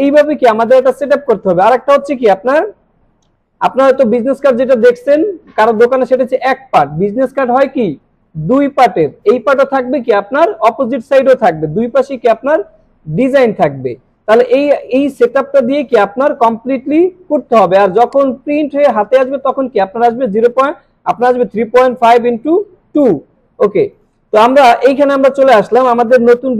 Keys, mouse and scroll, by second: 1.7 scroll up 1, 2.4 scroll down 1, 18.1 click, 24.0 click.